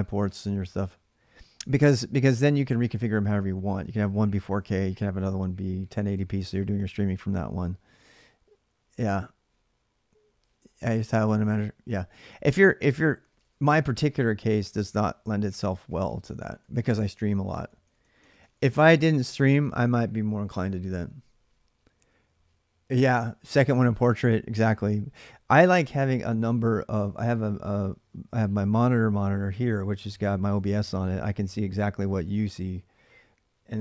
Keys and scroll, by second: 13.0-16.4 typing, 17.6 k, 18.2 k, 18.6 k.